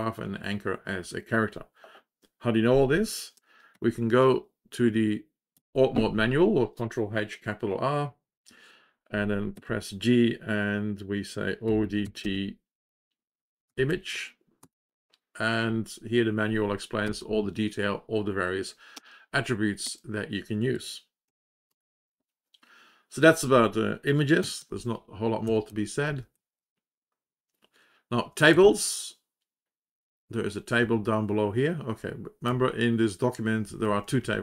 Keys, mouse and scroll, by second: 4.2 ctrl+r, 9.5 g, 11.3-14.5 typing, 17.0 space, 18.9 space, 19.8 space, 24.5 ctrl+l, 25.4 Down, 25.9 Down, 26.1 Down, 26.3 Down, 26.5-27.8 Down, 28.1 Down, 28.4-30.4 Down, 30.7-31.9 Down, 32.4-33.4 Up, 33.6 Up, 33.8 Up, 33.9 Up, 34.1 Up.